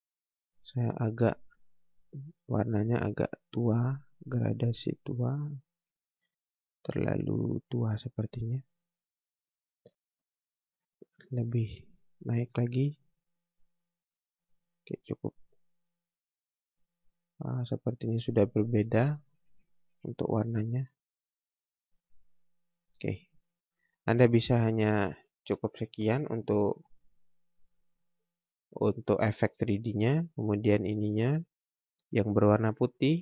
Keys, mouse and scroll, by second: 7.9 click, 17.7-18.0 scroll up 1, 20.7 click, 21.0 scroll down 1, 21.6 scroll up 1, 22.5 scroll down 1, 22.9 scroll up 1, 23.3 scroll down 1, 23.6 scroll up 1, 27.1 scroll down 1, 27.5 scroll up 1, 29.4 scroll up 1, 30.5 click, 31.0 scroll down 1, 32.4 click.